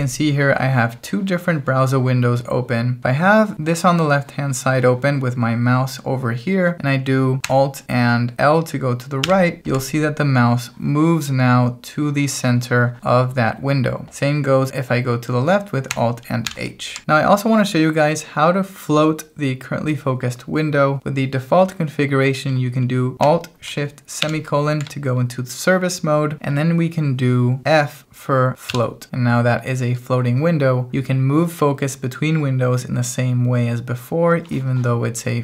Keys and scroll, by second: 9.2 alt+l, 16.5 alt+h, 24.2 alt+shift+;, 28.7 f.